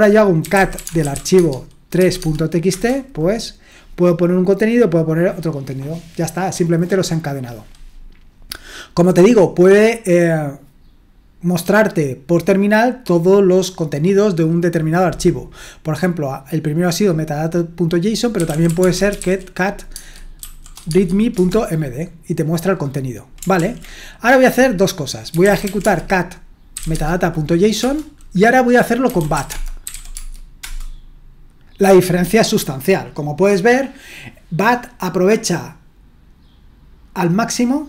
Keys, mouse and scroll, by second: 0.2-2.0 typing, 2.2 Tab, 2.7 Return, 18.1-20.4 typing, 19.9 shift+Tab, 20.9 Tab, 21.4 Return, 23.6 ctrl+l, 25.0-27.8 typing, 28.8-30.6 typing.